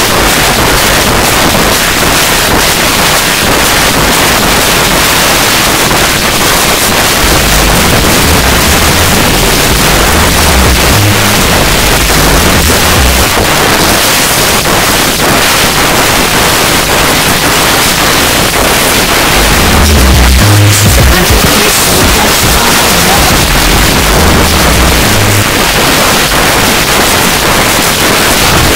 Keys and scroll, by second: 1.0 r, 1.3 Down, 1.8 Down, 2.2 Down, 2.3 Down, 2.5 Down, 2.8 Return, 13.2 Page_Down, 25.4 Page_Down.